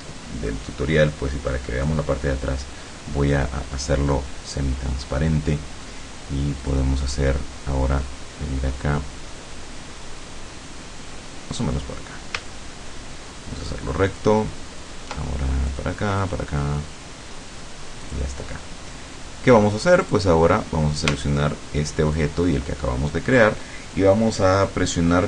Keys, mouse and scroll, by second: 6.7 click, 11.6 click, 14.1 ctrl+click, 15.7 click, 16.2 click, 18.0 click, 20.0 click, 22.2 shift+click.